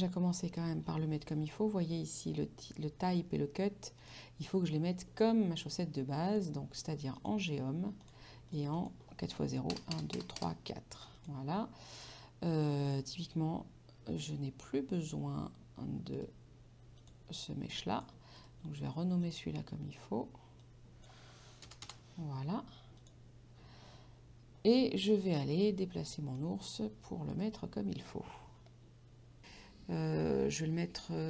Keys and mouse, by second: 4.0 click, 6.3 click, 9.8 KP_0, 11.3 click, 12.9 click, 16.2 right click, 17.0 click, 18.4 right click, 19.3 click, 20.6 click, 21.7 BackSpace, 23.0 click, 27.4 right click, 29.5 KP_5.